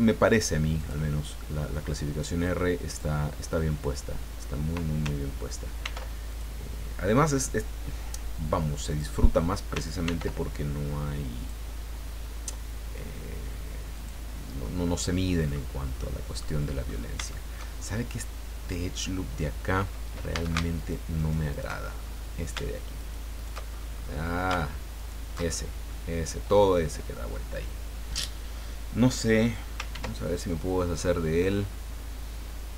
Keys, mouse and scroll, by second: 0.8 click, 2.9 click, 5.8 ctrl+r, 6.3 ctrl+click, 8.9 click, 10.0 ctrl+r, 11.3 click, 13.9 click, 14.6-15.7 middle drag, 16.0 middle click, 16.8-17.3 scroll up 3, 17.3 shift+middle click, 20.3 a, 20.7 alt+shift+right click, 21.1 alt+shift+right click, 21.9-22.3 alt+shift+scroll up 1, 23.0 alt+shift+right click, 24.0 scroll up 1, 24.9 alt+shift+right click, 25.4-26.1 alt+shift+scroll down 4, 29.9 ctrl+e.